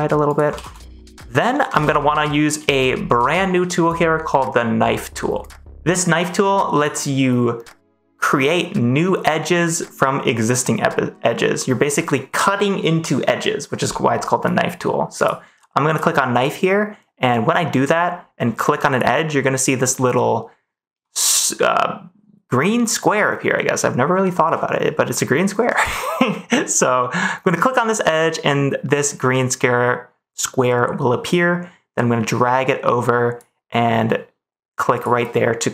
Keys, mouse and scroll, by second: 0.2 click, 0.5 ctrl+s, 0.9 middle click, 2.7 middle click, 15.1 click, 15.8 click, 18.8-25.7 drag, 27.4 middle click, 27.5-35.7 drag.